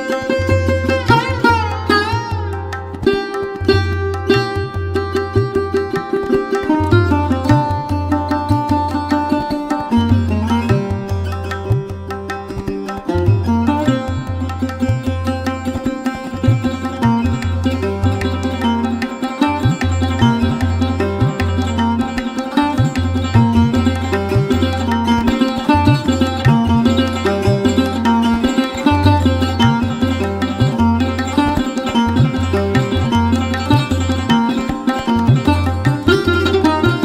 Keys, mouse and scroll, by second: 0.4 F1, 3.6-7.7 drag, 9.3 click, 10.1-11.0 scroll up 1, 11.0-15.1 drag, 16.3-17.9 scroll up 1, 19.0 F2, 20.2-21.8 drag, 21.6 F1, 22.3-24.7 drag, 27.5 click, 29.9 click, 31.6 click, 34.5 click, 35.5 click, 36.9-37.0 drag.